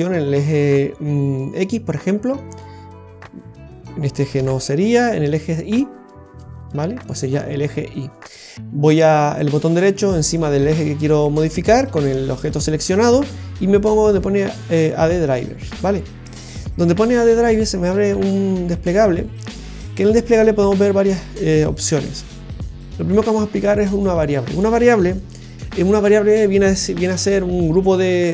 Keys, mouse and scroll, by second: 2.3 click, 4.3 ctrl+z, 5.6 click, 8.5 right click.